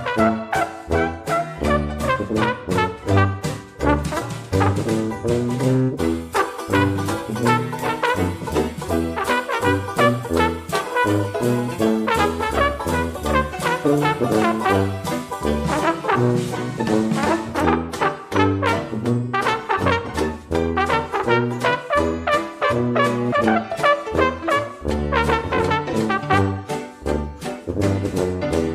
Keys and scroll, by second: 4.0 ctrl+d, 8.3 ctrl+d, 18.4 ctrl+d.